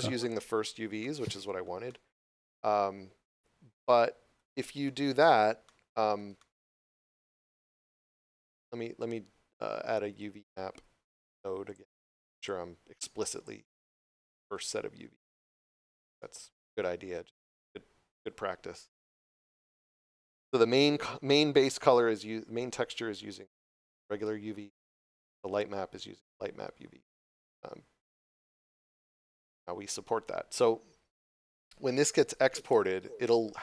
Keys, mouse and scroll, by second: 0.2 scroll up 1, 1.0 shift+middle click, 1.8 middle click, 4.8 shift+middle click, 5.3 scroll down 1, 5.6 middle click, 6.3 shift+middle click, 7.2 scroll up 1, 11.1 click, 14.2 shift+middle click, 14.7 scroll up 1, 15.2 shift+middle click, 17.3 click, 19.3 scroll down 1, 23.5 shift+middle click, 26.6 scroll down 1, 28.6 scroll up 1, 33.2 shift+middle click.